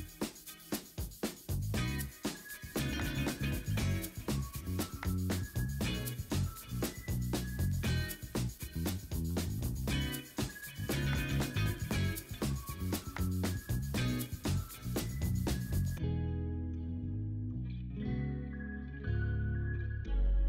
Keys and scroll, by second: 1.5 ctrl+d, 2.7 b, 5.8 3, 6.9 ctrl+d, 13.0 ctrl+z, 14.5 ctrl+z, 15.7 ctrl+z, 16.4 1, 19.8 i.